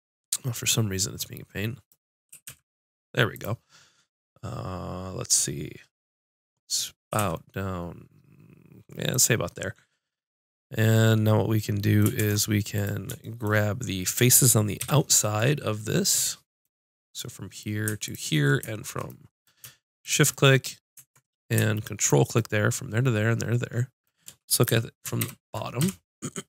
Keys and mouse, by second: 2.3 g, 3.4-5.5 drag, 7.1-11.0 drag, 7.1 g, 12.2 ctrl+Tab, 14.8 KP_5, 17.1 click, 18.0-23.7 drag, 24.6 middle click, 24.8 KP_7, 25.8 KP_5.